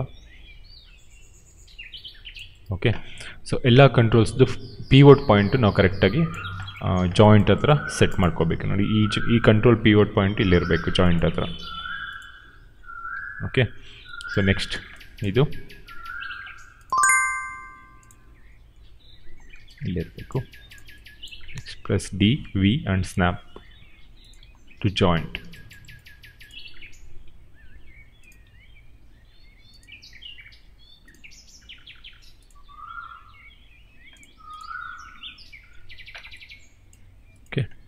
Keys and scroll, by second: 9.3-13.1 typing, 16.0-18.7 typing, 21.5-25.0 typing, 26.8-32.6 typing, 33.8 d.